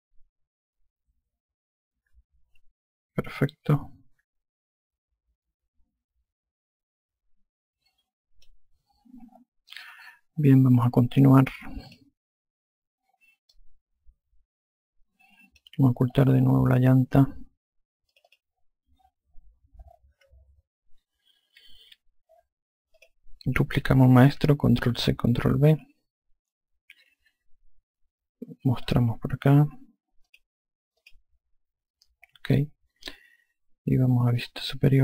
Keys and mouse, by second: 12.7 click, 14.3 alt+click, 18.9 click, 23.8 click, 31.1 click.